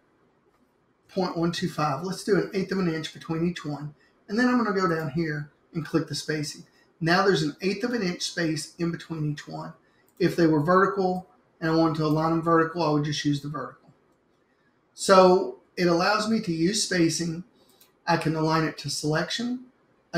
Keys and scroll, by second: 1.0-2.5 typing.